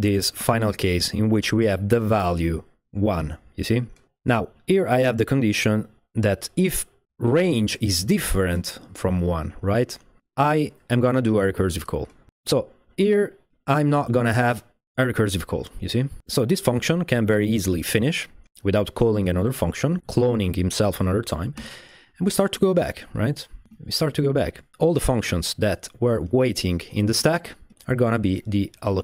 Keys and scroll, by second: 21.6 space, 22.6 space, 23.2 space, 24.0 space, 26.3 space, 26.6 space, 27.1 space, 27.3 space, 28.9-29.0 typing.